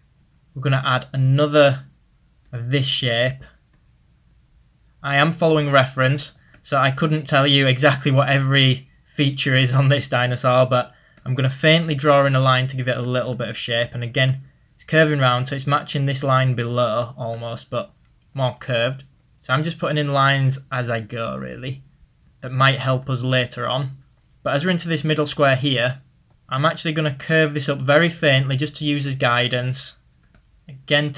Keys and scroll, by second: 2.8 ctrl+z, 8.0-9.5 typing, 16.7 ctrl+z, 24.4 ctrl+z, 30.2 ctrl+z.